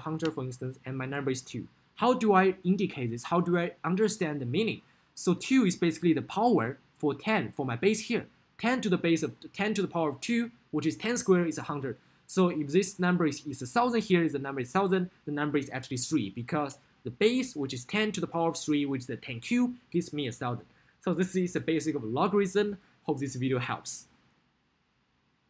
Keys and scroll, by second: 0.3 Return.